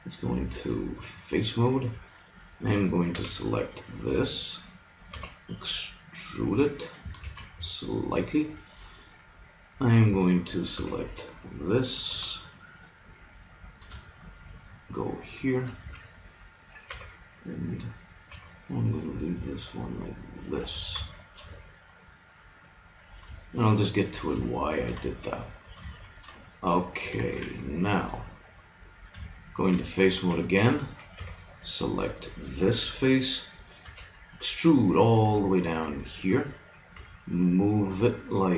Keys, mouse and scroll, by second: 3.2 b, 5.2 e, 7.2 ctrl+Tab, 10.1 a, 10.9 b, 12.2 g, 15.2 middle click, 15.8 a, 17.0 b, 18.4 g, 20.6 click, 20.8 a, 22.2-24.8 middle drag, 27.2 ctrl+Tab, 31.2 b, 33.9 e, 37.0 g.